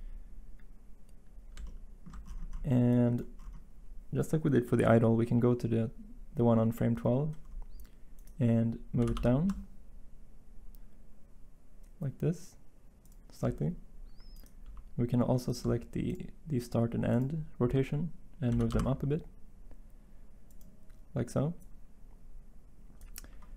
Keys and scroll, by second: 8.9 g, 9.1 y, 18.4 g, 18.6 y.